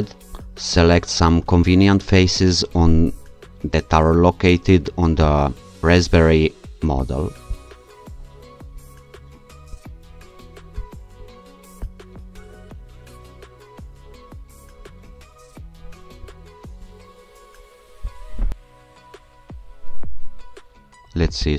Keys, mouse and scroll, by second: 5.3 alt+click, 7.5 click, 9.7 ctrl+shift+click, 10.8 ctrl+click, 11.8 ctrl+click, 15.2-16.2 scroll up 3, 16.3 ctrl+click, 18.1 ctrl+click, 18.5-19.3 scroll down 2, 19.3-19.8 scroll down 1, 21.3-21.5 shift+drag.